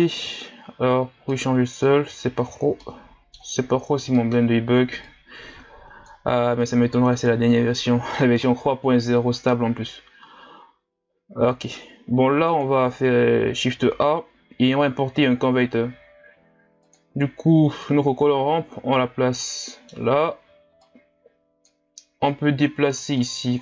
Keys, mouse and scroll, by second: 0.3-1.3 scroll down 2, 1.3-2.3 scroll down 1, 2.3-2.8 scroll down 3, 2.8-5.0 middle drag, 5.0-17.9 drag, 23.2-23.6 drag.